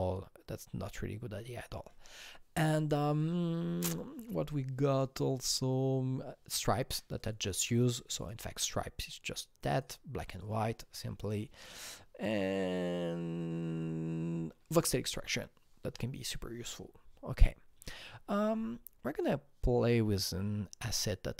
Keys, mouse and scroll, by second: 7.2 click, 8.2 click, 9.7 click, 11.2-13.5 drag, 17.8 click, 21.0 click.